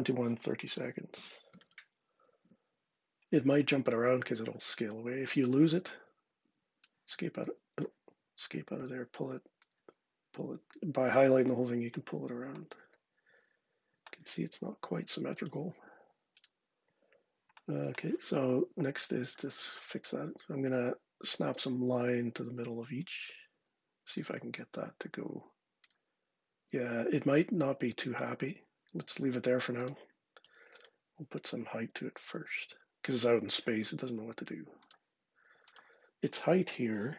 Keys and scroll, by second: 0.3-1.9 typing, 2.3 Return, 5.6 Escape, 6.3 Escape, 23.3 Escape, 26.8 super+z, 27.7 super+z, 28.9 Escape, 30.3 x, 31.7 d.